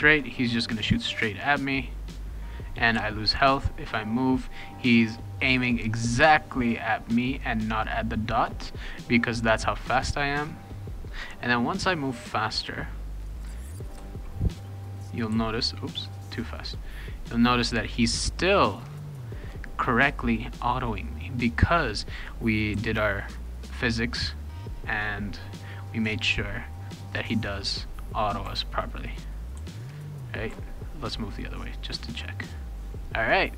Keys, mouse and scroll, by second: 2.9 d, 9.6 shift+d, 14.0 w, 15.3 shift+d, 22.7 w, 23.8 shift+d, 25.6 shift+d, 26.0 shift+d, 26.2 shift+d, 28.4 shift+a, 29.6 shift+d, 30.5 shift+a, 32.3 click.